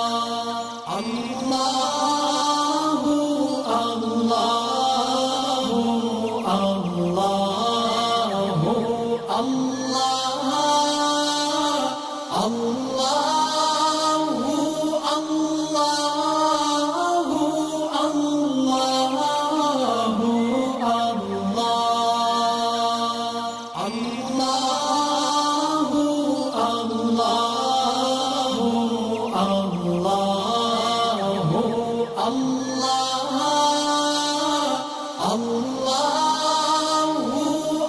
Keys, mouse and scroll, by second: 0.2 click, 0.9-1.8 alt+drag, 2.8-3.5 drag, 6.1 alt+scroll down 1, 7.1 click, 7.8 alt+scroll up 1, 8.3 alt+scroll up 1, 11.2 alt+scroll down 1, 11.9 alt+scroll up 1, 12.2 click, 15.7-16.5 click, 16.6-17.4 drag, 18.8-19.1 scroll down 2, 19.5 click, 20.0 alt+scroll up 1, 20.8 space, 20.9 click, 21.6-22.0 alt+scroll up 2, 22.0 click, 23.4-29.3 drag, 27.5-28.7 drag, 29.7-31.1 drag, 32.7-34.6 drag, 36.6-37.8 drag.